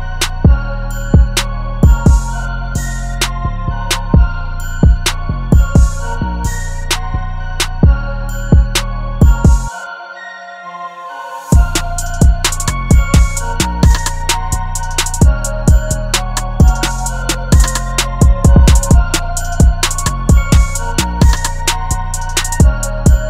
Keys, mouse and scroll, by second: 2.3 ctrl+z, 3.9 double click, 7.1 typing, 8.4 double click, 13.1 double click, 20.8 right click.